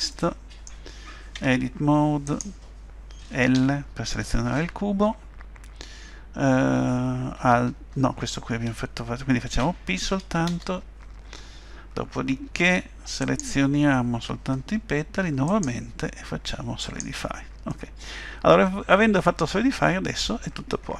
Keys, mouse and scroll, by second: 0.1 middle click, 1.4 Tab, 2.3 click, 3.5 l, 12.5 Tab, 13.2 click, 15.5 click, 17.7 middle click.